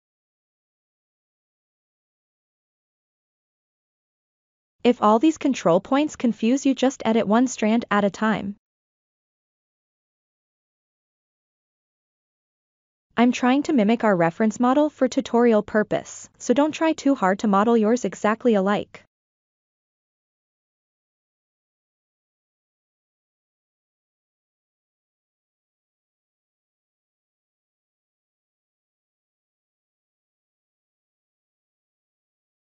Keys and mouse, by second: 0.7-2.8 middle drag, 3.0 ctrl+middle drag, 3.4 shift+middle click, 4.5-5.4 middle drag, 6.9 Tab, 9.4 a, 10.1 alt+s, 12.2-13.4 middle drag, 13.8 Tab, 15.5 Tab, 16.9 a, 17.6 alt+s, 19.1-22.2 middle drag, 22.5 middle click, 22.8 Tab, 22.8 click, 23.1 Tab, 23.4 a, 23.6 alt+s, 24.1-26.1 middle drag, 26.2 Tab, 26.3 click, 26.6 Tab, 27.1 a, 27.4 alt+s, 28.4 middle click, 29.4 alt+s, 30.1 shift+middle click, 30.5 Tab, 30.7 Tab, 31.1 a, 31.5 alt+s, 32.0 middle click.